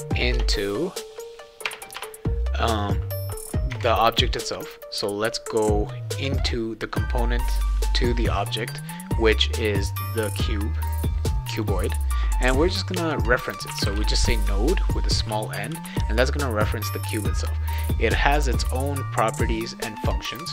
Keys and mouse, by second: 0.3 BackSpace, 1.6 BackSpace, 2.0 Return, 2.7 click, 3.7 Tab, 5.0-5.8 drag, 8.4 click, 10.7 click, 13.4-15.7 typing.